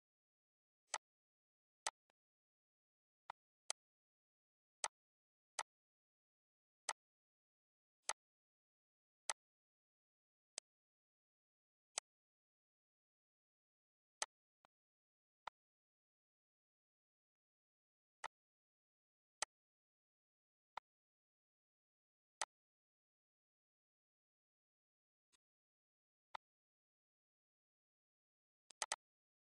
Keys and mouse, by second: 2.5 ctrl+s, 3.1 click, 4.6 click, 5.4 click, 6.6 click, 7.8 click, 9.1 click, 10.3 click, 11.7 click, 14.0 click, 15.2 click, 17.1 click, 18.0 click, 19.2 click, 20.6 click, 22.2 click, 25.1 click, 26.1 click, 28.4 click.